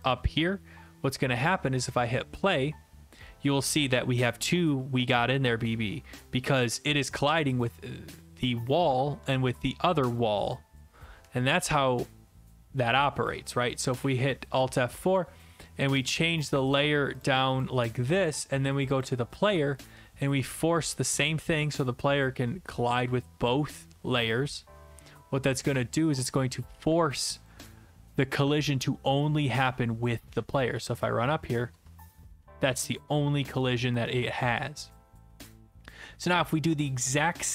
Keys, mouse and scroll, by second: 0.1 click, 1.9 click, 7.6 click, 10.2 click, 14.0 alt+F4, 16.1 click, 16.7 click, 17.2 click, 17.6 click, 19.0 click, 27.5 click, 30.3-31.8 w, 32.4-33.3 s, 34.0 alt+F4.